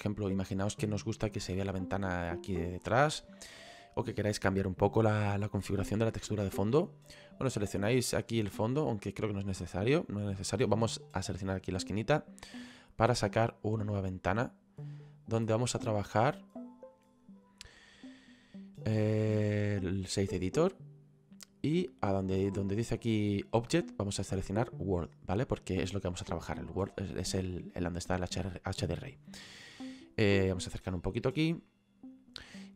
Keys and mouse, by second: 8.8 click, 13.0 click, 16.7 click, 20.5 click, 22.7 click, 24.9 click, 26.1 middle click, 31.8 middle click.